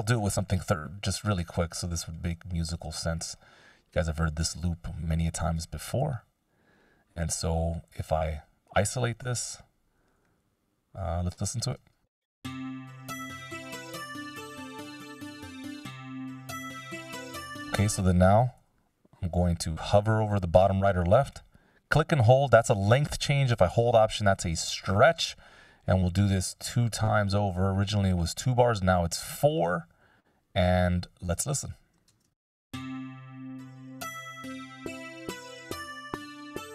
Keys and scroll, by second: 0.4 o, 9.7 s, 12.4 space, 17.6 space, 19.0 c, 32.2 shift+space, 33.7 k.